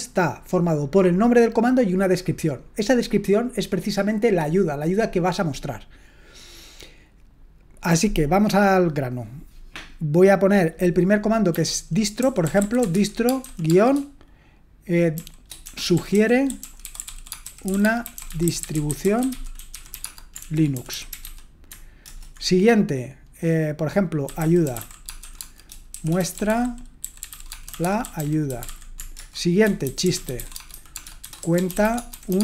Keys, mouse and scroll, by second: 12.2-13.9 typing, 14.9-21.2 typing, 22.0 shift+Return, 24.3-32.4 typing.